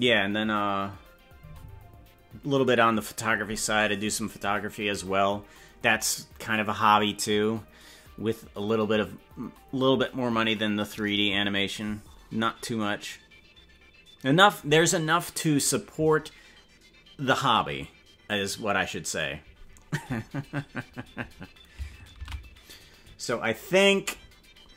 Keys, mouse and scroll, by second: 24.2 ctrl+s.